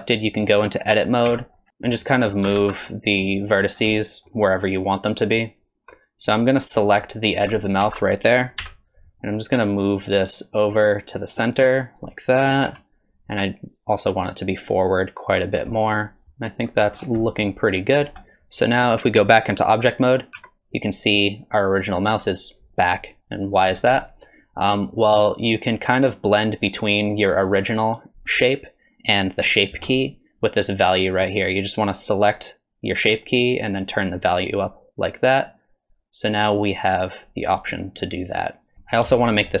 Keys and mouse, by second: 1.3 Tab, 2.1 middle click, 2.6 alt+z, 2.9 middle click, 4.0 middle click, 4.9 click, 5.5 shift+click, 6.8 middle click, 7.8 alt+z, 8.6 KP_1, 9.7-12.0 drag, 12.7 KP_3, 13.8-15.6 drag, 15.8 middle click, 16.2 shift+click, 17.2 middle click, 20.4 Tab, 23.2-23.7 middle drag, 29.5 shift+middle drag, 33.8-38.7 drag, 39.5 middle click.